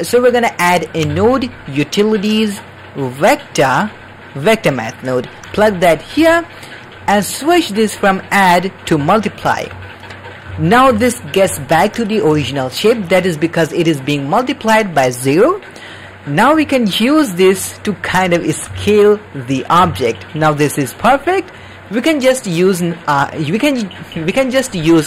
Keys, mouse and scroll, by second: 1.0 shift+a, 6.8 middle click, 7.5-8.9 drag, 9.3 middle drag, 9.8-10.4 ctrl+middle drag, 10.5-10.9 shift+middle drag, 11.0 ctrl+middle click, 11.5 shift+middle click, 12.4 ctrl+middle click, 13.4 middle click, 14.2 middle click, 16.6-18.4 shift+drag, 18.8 shift+click, 19.9-21.4 shift+drag.